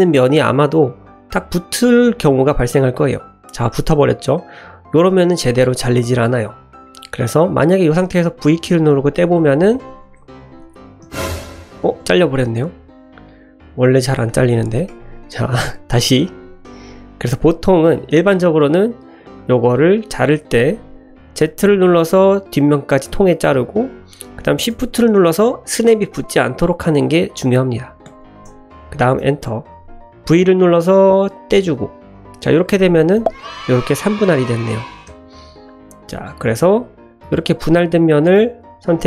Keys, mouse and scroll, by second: 0.5 shift+middle click, 0.8 shift+middle click, 2.1 shift+middle click, 2.9 middle click, 6.7 shift+middle click, 7.0 middle click, 8.3 v, 9.3 Escape, 9.8 shift+click, 10.3 click, 11.1 l, 12.6 middle click, 14.4 click, 15.2 click, 16.3 k, 16.6-29.9 drag, 30.3 v, 31.7 Escape, 33.2 l, 34.3 l, 35.1 l, 35.8 Escape, 36.1 click, 37.2 l, 38.4 l.